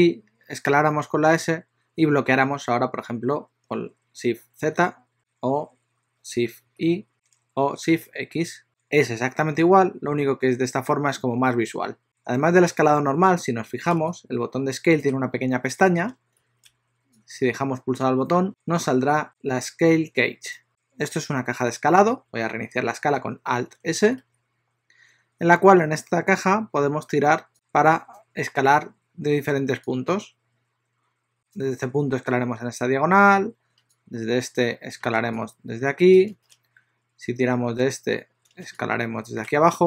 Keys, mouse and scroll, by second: 0.8 s, 12.0 click, 17.3 click, 24.3 alt+s, 27.5 click, 30.1 click, 33.9 click.